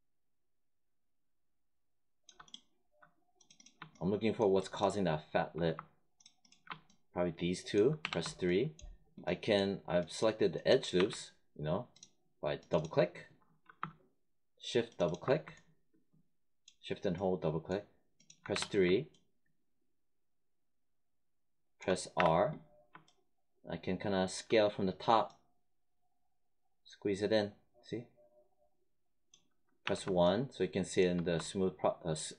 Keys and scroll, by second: 7.9 3, 10.9 1, 18.4 3, 22.1 r, 29.7 1.